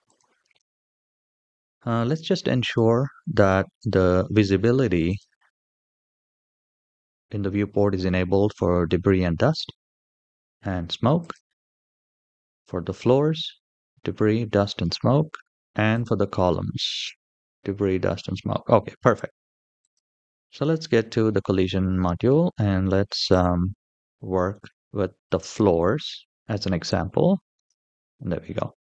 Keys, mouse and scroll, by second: 2.4 click, 4.9 click, 12.0 click, 16.6 click, 19.6 click, 23.3 click, 23.8 shift+middle click, 23.8-24.2 scroll down 2, 24.4 shift+middle drag, 27.3 click, 28.4 shift+middle click.